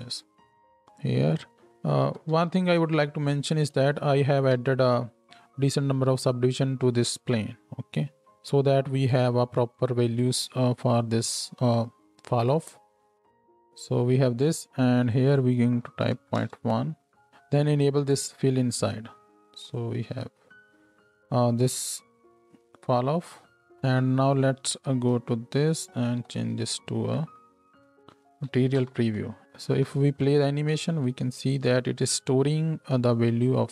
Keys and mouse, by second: 0.3 ctrl+shift+drag, 2.3 Tab, 4.5 Tab, 4.5-17.3 middle drag, 13.0 Tab, 17.3-18.6 drag, 18.6 middle click, 18.8-19.7 drag, 19.7 middle click, 19.8-24.3 drag, 21.8 space, 23.5 space, 23.6 x, 24.4 click, 24.9 Tab, 25.7 z, 27.9 click, 28.7 shift+Right, 28.8 shift+Left, 28.8 shift+click, 29.4 shift+space, 29.6 shift+click, 29.7 shift+Left, 29.9 click, 30.8 space, 32.8-33.7 drag.